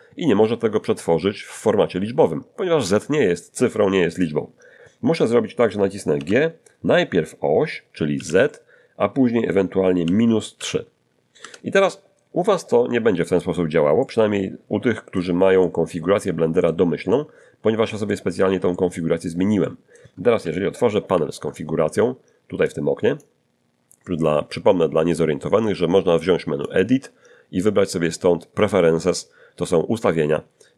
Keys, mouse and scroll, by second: 6.1 g, 8.1 z, 10.5 -, 10.5 3, 11.4 Return, 14.0-15.3 middle drag, 15.6-16.9 middle drag, 17.1-18.3 middle drag, 18.7 middle click, 19.6 middle click, 21.0 ctrl+alt+u, 22.7 click, 26.6 click.